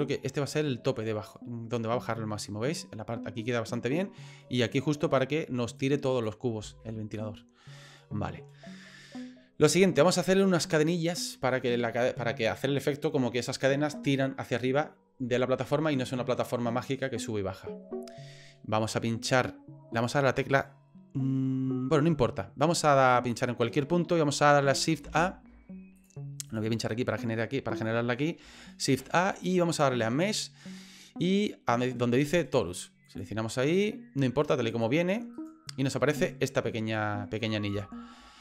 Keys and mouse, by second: 5.8 click, 7.2-8.4 middle drag, 23.3 click, 25.0 shift+a, 26.0 click, 28.9 shift+a, 35.3 right click, 36.2 right click, 36.9 middle click, 37.9 shift+middle click.